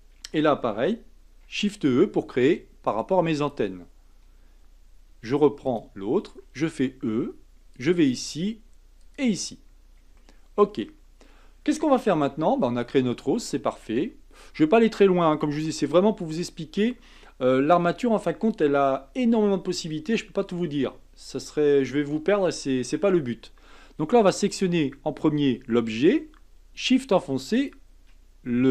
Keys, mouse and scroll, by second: 0.1 e, 1.4 shift+e, 5.6 click, 6.3 e, 8.0 e, 10.2-12.2 shift+middle drag, 12.2 Tab, 12.9-15.7 middle drag, 15.7 KP_1, 24.4 click, 27.5 shift+click.